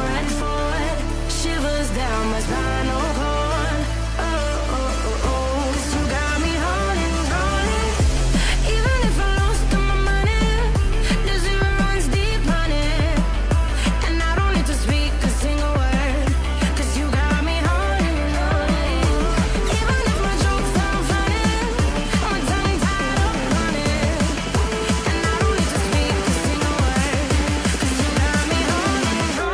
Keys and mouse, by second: 0.5 KP_3, 0.9 g, 2.2 r, 3.2 r, 4.6 r, 7.9 ctrl+Tab, 10.7 g, 11.9 g, 16.5 click, 17.3 ctrl+Tab, 21.5 click, 22.1 click, 23.1 click, 24.1 r, 25.9 ctrl+z, 26.2 r, 28.0 ctrl+z, 28.9 click, 29.3 r.